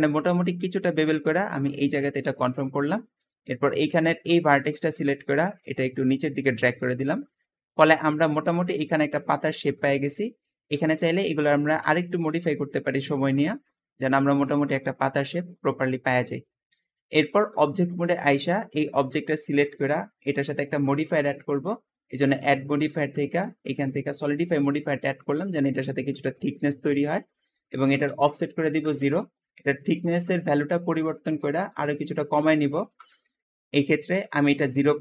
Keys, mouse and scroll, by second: 1.6 click, 3.2 click, 5.6 click, 9.6 scroll up 1, 10.0 shift+middle click, 10.7 shift+click, 11.3 shift+click, 11.7 s, 13.1 click, 13.9 click, 15.1-15.9 scroll down 4, 16.4 Tab, 16.9-17.6 middle drag, 17.6-18.0 scroll up 2, 18.0-18.4 shift+middle drag, 18.4-19.8 scroll up 1, 20.1 shift+click, 21.0-24.2 shift+drag, 24.9-26.3 middle drag, 26.3-26.9 scroll up 1, 26.9 shift+middle click, 27.8-31.1 shift+drag, 28.3 typing, 28.7 Return, 30.8-32.3 typing, 33.1 Return.